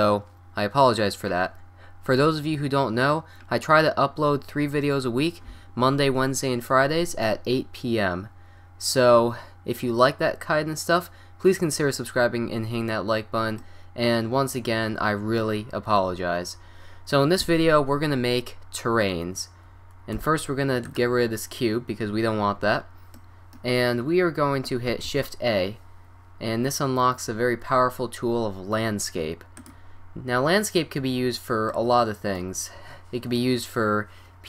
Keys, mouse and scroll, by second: 2.5-7.3 middle drag, 8.5-20.2 middle drag, 20.2 Delete, 21.9-25.1 middle drag, 25.1 shift+a, 31.0-34.4 middle drag.